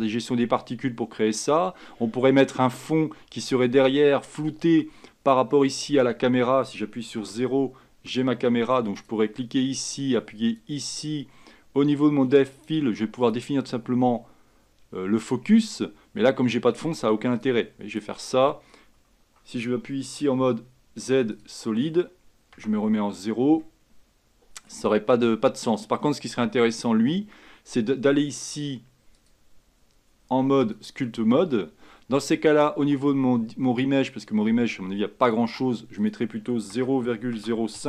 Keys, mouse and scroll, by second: 1.8 scroll down 2, 7.3 KP_0, 9.2 click, 12.7-16.2 drag, 21.5 z, 22.7 KP_0, 23.7-26.3 middle drag, 26.3-26.9 scroll up 2, 26.9 click, 30.9-37.8 drag.